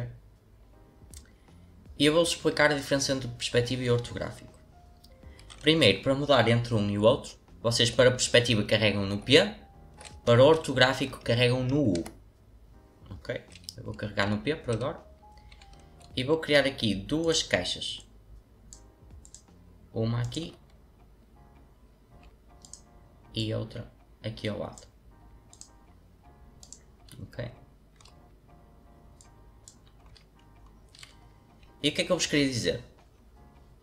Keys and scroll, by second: 9.0 p, 11.9 u, 14.2 p.